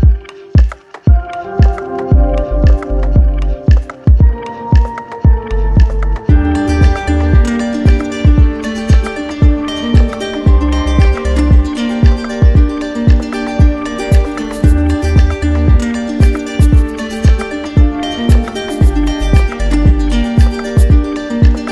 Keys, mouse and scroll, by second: 1.8 alt+click, 2.3 ctrl+z, 3.6 alt+click, 4.6 shift+click, 5.0 shift+click, 6.2 shift+click, 6.5 shift+click, 6.8 shift+click, 7.1 shift+click, 7.9 shift+click, 8.4 shift+click, 8.9 shift+click, 9.1 shift+click, 9.4 shift+click, 9.8 shift+click, 10.2 shift+click, 10.6 shift+click, 11.4 shift+click, 12.3 right click, 13.0 shift+click, 13.6 shift+click, 14.1 shift+click, 14.9 shift+click, 15.2 shift+click, 16.1 shift+click, 16.4 shift+click, 16.6 shift+click, 16.9 shift+click, 17.2 shift+click, 18.7 alt+right click, 19.4 alt+right click, 19.8 alt+right click.